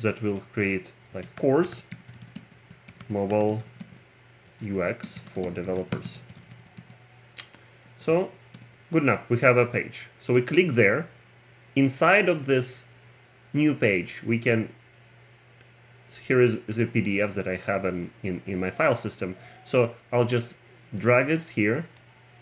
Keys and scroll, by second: 1.0-7.3 typing, 8.0 Right, 8.6 Return.